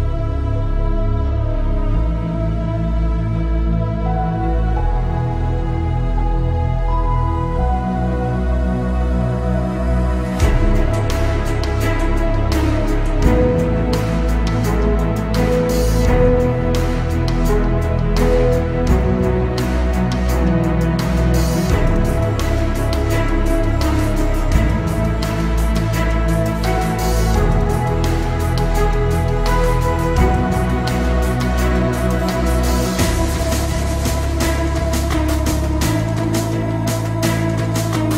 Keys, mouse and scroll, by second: 0.4 click, 1.1 right click, 1.8 click, 2.8 m, 3.2 ctrl+click, 4.4 Right, 6.4 click, 6.5 space, 7.2 s, 7.6 click, 9.4-11.2 typing, 11.7 click, 11.8 click, 12.8 Right, 12.9-15.4 middle drag, 15.4 click, 15.5 space, 15.7-16.0 scroll down 1, 16.0 middle click, 16.7-17.2 scroll up 1, 17.2 click, 18.1 p, 18.2 click, 18.7 shift+middle click, 19.4 scroll down 1, 19.7 shift+middle click, 21.0-22.5 scroll up 1, 22.5 click, 22.7 space, 22.8-23.4 scroll down 1, 23.4 click, 23.7-24.1 scroll up 1, 24.1 click, 25.6 space, 25.8 middle click, 27.3 scroll down 1, 28.7 shift+z, 29.1 middle click, 29.5 scroll up 1, 29.8 shift+middle click, 31.2 m, 31.8 ctrl+click, 33.0 Right, 34.9 click, 35.0 space, 35.1 scroll down 1, 35.7 middle click, 36.6 shift+click, 36.9 right click, 37.7 click.